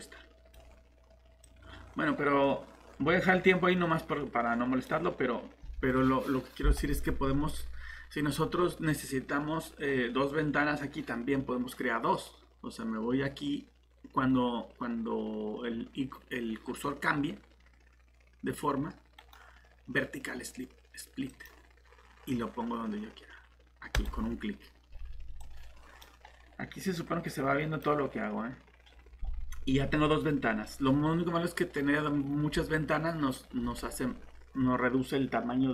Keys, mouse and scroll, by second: 19.2 right click, 21.3 click.